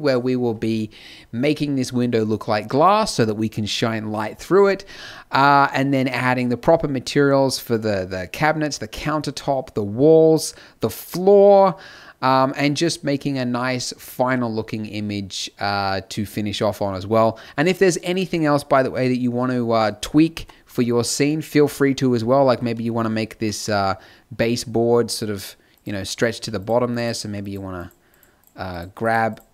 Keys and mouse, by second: 10.9-20.3 drag, 20.3 KP_Decimal, 22.7 z, 23.1 z, 25.3 click, 26.3 z.